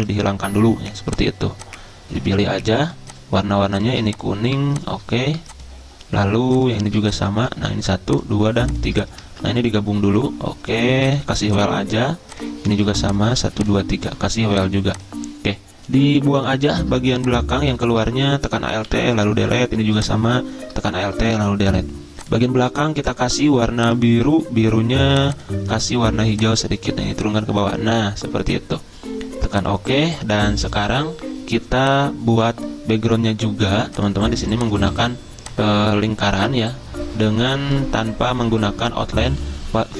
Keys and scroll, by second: 7.5 ctrl+z, 9.3 ctrl+z, 18.9 Delete, 21.3 Delete, 29.9 z.